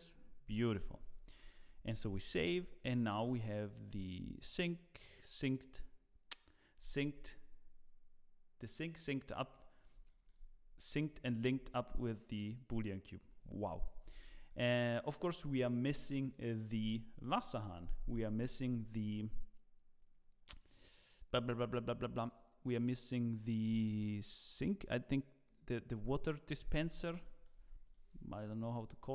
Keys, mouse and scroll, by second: 1.9 ctrl+s, 2.3 middle click, 3.2-4.7 scroll down 1, 4.7 middle click, 9.5 middle click, 10.0 shift+middle click, 11.5 scroll up 1, 12.4 click, 12.4 scroll up 2, 13.9 ctrl+s, 14.1-14.6 scroll down 3, 14.4 middle click, 16.0 middle click, 20.5 click, 22.8 click, 27.2 shift+middle click.